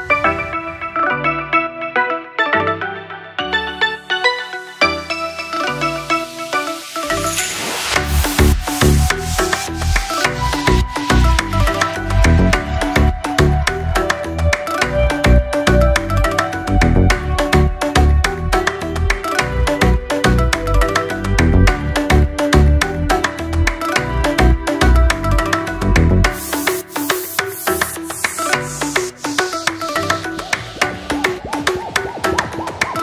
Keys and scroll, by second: 30.6 p.